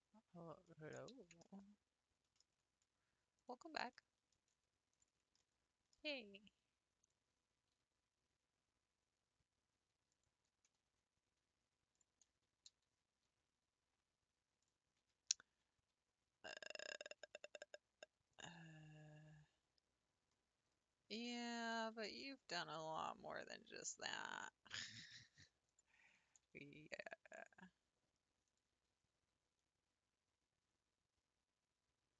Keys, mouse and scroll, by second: 0.7 middle click, 1.2 ctrl+z, 1.4-3.4 middle drag, 3.4 ctrl+click, 4.0 middle click, 4.9 ctrl+click, 5.4-7.0 middle drag, 7.0 click, 7.7 r, 11.9 alt+click, 12.8 s, 18.3 click, 19.0 scroll down 1, 21.2 click, 21.7 g, 21.8 g, 25.7 click, 26.2 g, 26.3 g, 29.0 r.